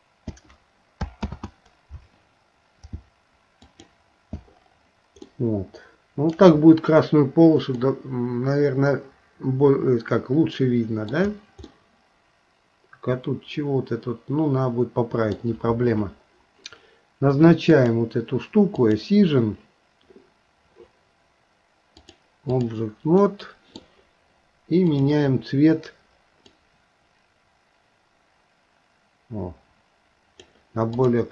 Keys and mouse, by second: 1.3 ctrl+z, 5.3-6.4 middle drag, 7.8 middle click, 9.0-11.1 middle drag, 11.7-15.4 middle drag, 18.9 click, 22.0 click, 23.2 middle click, 24.8 click, 31.0 click.